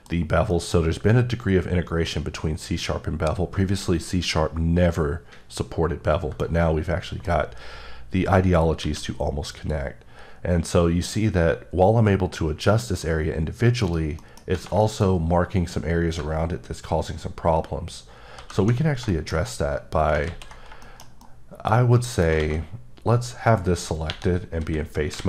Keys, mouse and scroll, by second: 0.2 scroll up 1, 0.5 middle click, 6.4 middle click, 8.8 q, 9.5 click, 13.8 right click, 14.8 shift+middle click, 18.3 alt+h, 19.1 shift+middle click, 19.5-20.1 scroll up 1, 20.3 ctrl+z, 20.5 ctrl+scroll down 3, 21.6 scroll down 1, 22.0 middle click, 22.4 a.